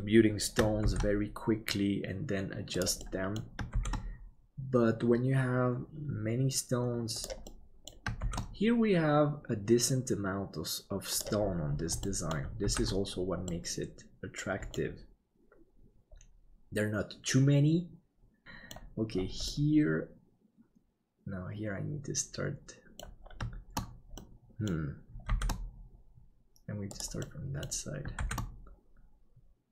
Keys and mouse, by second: 0.8 shift+d, 3.1 middle click, 7.6 middle click, 8.2 shift+d, 12.1 middle click, 12.8 ctrl+s, 13.6-14.8 middle drag, 19.6-23.1 middle drag, 24.3 middle click, 25.3 shift+d, 27.4 middle click.